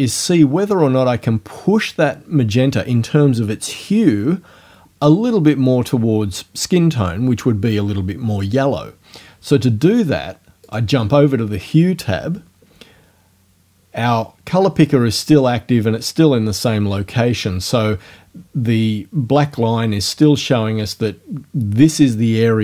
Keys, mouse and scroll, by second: 10.7 click.